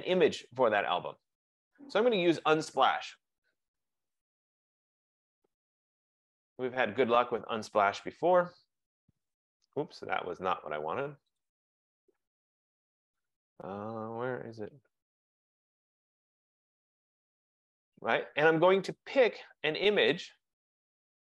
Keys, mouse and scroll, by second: 1.1 click, 2.9 click, 3.6-6.0 typing, 9.3 click, 10.8 typing, 14.5 middle click, 14.6 middle click, 14.8 middle click, 16.2 click, 19.8 middle click, 20.3-21.0 scroll, 21.0-21.3 scroll.